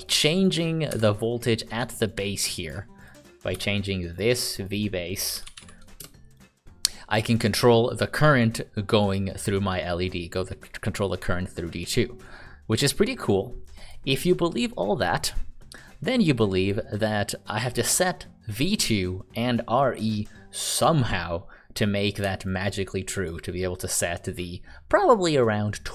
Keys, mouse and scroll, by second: 0.0 click, 0.9 Delete, 3.0 click, 3.5 n, 4.1 click, 5.0-6.0 typing, 7.3 click, 22.5 ctrl+click.